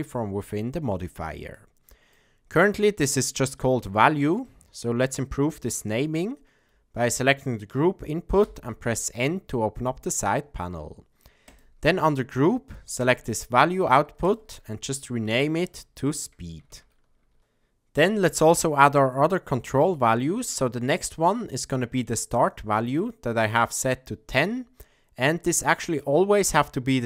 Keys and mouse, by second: 1.5 middle click, 4.5 middle click, 7.1 click, 8.4 n, 11.5 click, 13.0 click, 14.2-17.4 drag, 20.5-22.1 drag.